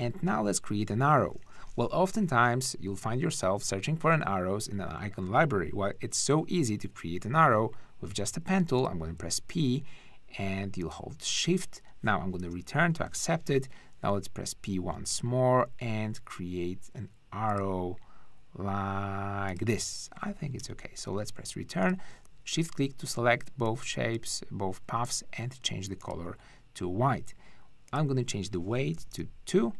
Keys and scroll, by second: 7.3 p, 12.4 Return, 13.6 p, 20.6 Return, 21.3 shift+Return, 28.9 BackSpace, 28.9 2, 29.1 Return.